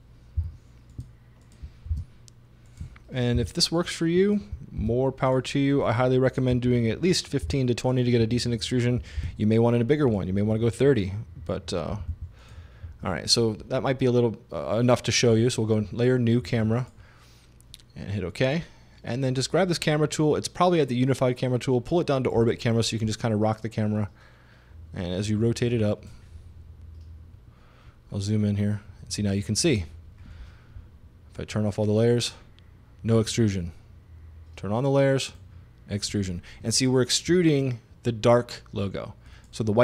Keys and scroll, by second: 0.4 8, 1.9 super+d, 3.4 9, 4.8 super+d, 6.6 i, 7.5 0, 9.2 super+d, 11.9 i.